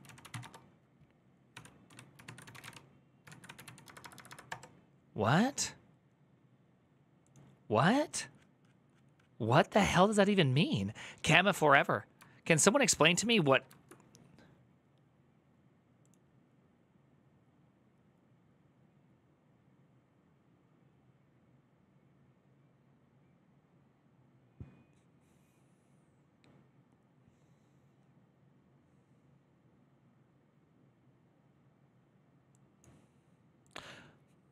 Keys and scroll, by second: 0.0-4.1 typing, 4.3 Return.